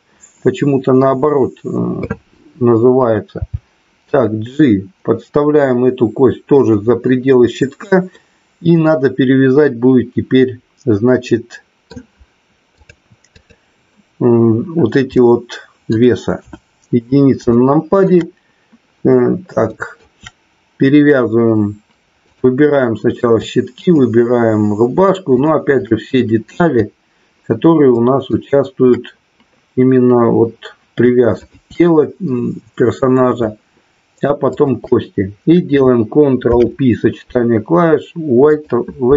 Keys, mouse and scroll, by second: 3.4 g, 6.5 click, 8.2-11.9 middle drag, 12.8 click, 15.2 middle click, 16.3 KP_1, 17.5 shift+middle click, 19.7 shift+middle click, 22.2 click, 23.9 shift+click, 25.3 shift+click, 27.9 shift+middle click, 31.4 shift+click, 36.4 ctrl+p.